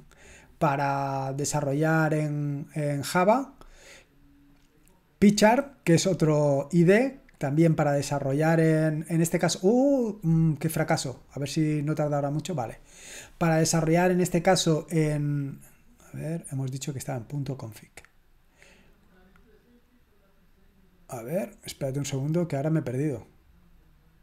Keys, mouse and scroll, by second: 5.2 click, 7.1 click, 8.5 click, 11.3 click, 15.1-15.7 scroll up 1, 15.7-16.1 scroll up 1, 18.9 click.